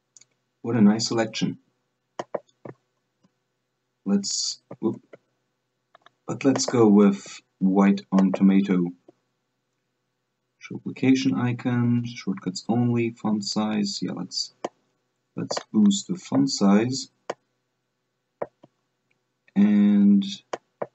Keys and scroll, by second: 3.2 Right, 5.2 Left.